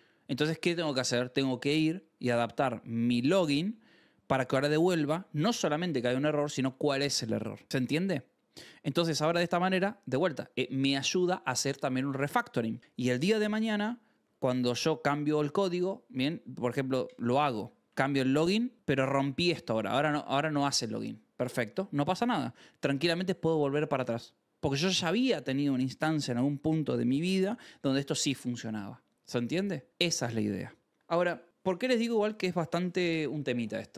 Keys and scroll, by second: 18.7-20.9 typing, 21.8 ctrl+c.